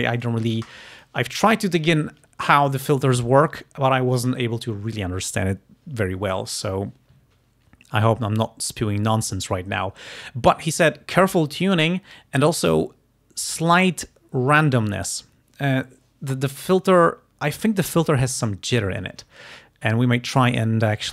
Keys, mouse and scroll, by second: 1.0 click, 20.6 click.